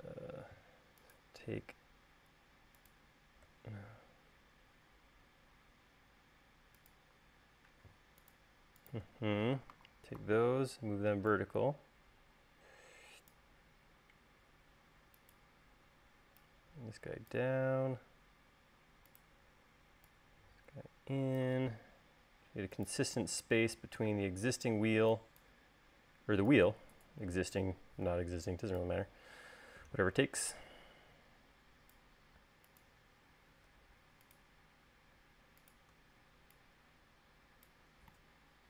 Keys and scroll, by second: 10.4 v.